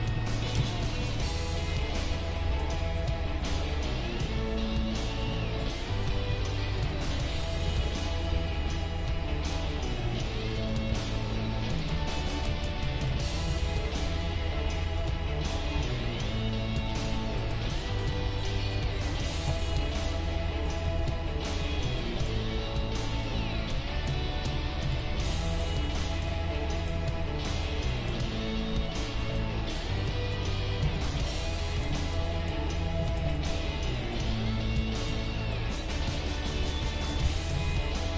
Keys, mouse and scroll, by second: 0.5 ctrl+KP_3, 1.4 ctrl+KP_3, 3.1-4.8 middle drag, 5.3 middle click, 6.0-9.4 right drag, 6.3 Tab, 7.7 g, 10.6-14.0 right drag, 10.9 g, 12.7-15.0 ctrl+drag, 13.5 g, 15.6-17.3 right drag, 15.8 g, 17.5-19.2 middle drag, 20.7-22.0 right drag, 20.8 g, 22.0 middle click, 24.1 g, 29.8-38.1 middle drag, 30.3-32.9 right drag, 37.2 r.